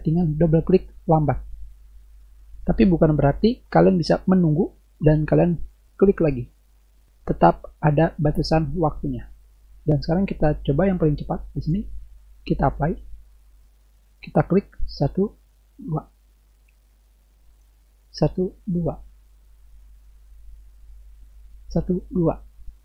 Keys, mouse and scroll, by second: 10.9-11.7 drag, 12.7 click, 15.1 click, 15.7 click, 17.5 click, 18.7 click, 20.9 click, 21.7 click.